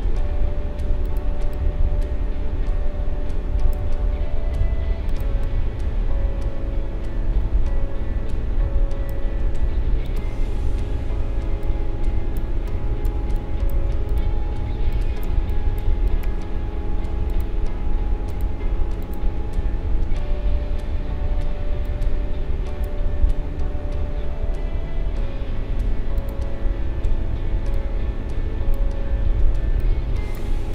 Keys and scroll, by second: 11.4 space, 29.6 space.